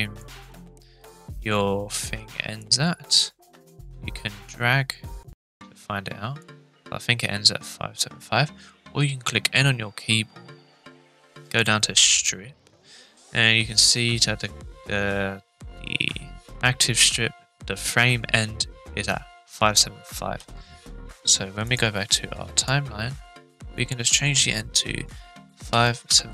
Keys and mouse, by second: 2.6-6.4 drag, 9.4 n, 11.4 click, 20.3 n, 21.6-22.0 drag, 22.6 click, 23.8-26.3 drag.